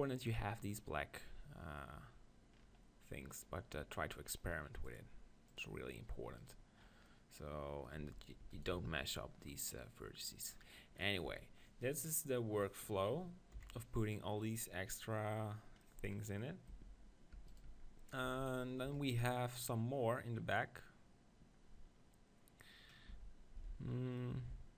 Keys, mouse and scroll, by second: 4.8-6.4 drag, 6.4 middle click, 6.8-8.4 right drag, 7.1-8.4 middle drag, 8.0 Tab, 8.4 Tab, 8.8 Tab, 11.3 Tab, 13.5 KP_7, 16.7 Tab, 17.4 Tab, 17.5 right click, 18.3 Tab, 18.4 click, 18.9 KP_1, 19.8-21.7 middle drag, 22.9-24.2 middle drag, 23.1 Tab.